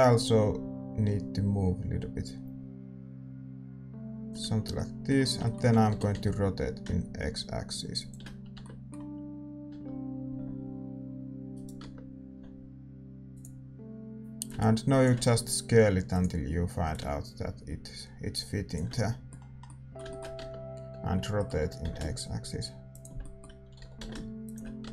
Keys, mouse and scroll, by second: 4.5-7.9 middle drag, 5.9 r, 8.5 Tab, 8.5-11.5 middle drag, 9.6 Tab, 10.2 s, 11.8 Tab, 12.2 s, 14.4-18.9 drag, 15.3 s, 18.9-21.6 middle drag, 20.3 Tab, 21.6 r, 23.7 r, 24.8 Tab.